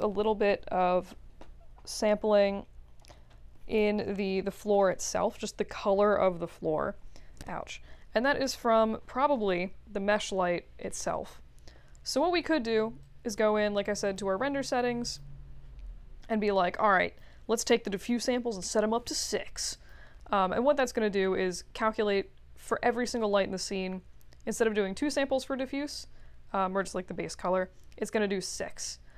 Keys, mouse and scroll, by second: 2.5 scroll up 2, 3.1-3.5 alt+middle drag, 4.7-5.1 alt+middle drag, 13.0 click, 14.0 click, 15.0 click, 16.9 click, 18.6 6, 19.7 click.